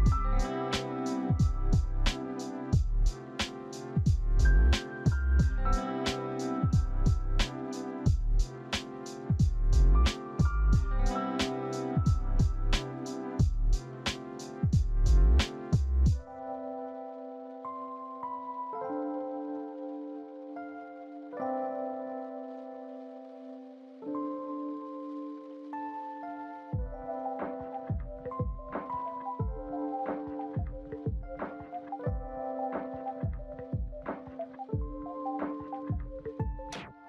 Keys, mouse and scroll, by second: 7.8 double click, 8.4-9.2 typing, 8.8 Tab, 9.4 Return, 12.3 alt+w, 13.2 alt+w, 14.3 alt+z, 14.9 alt+click, 15.7 alt+middle click, 20.5 e, 21.5 right click, 28.4 right click, 35.6 alt+click.